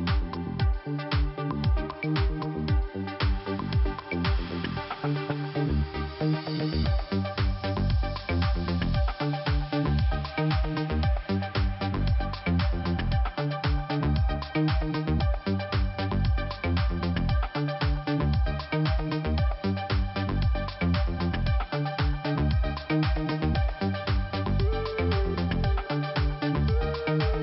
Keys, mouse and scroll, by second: 1.0 click, 1.1 click, 2.4 click, 4.5 click, 4.6 click, 5.2 click, 7.3 click, 8.4 click, 10.8 click, 12.0 click, 14.2 click, 15.0 click, 16.5-16.8 scroll down 1, 17.3 click, 21.2 click, 22.7 scroll up 2, 24.1 click, 25.0 click, 26.5 click, 26.6 click, 27.1 click.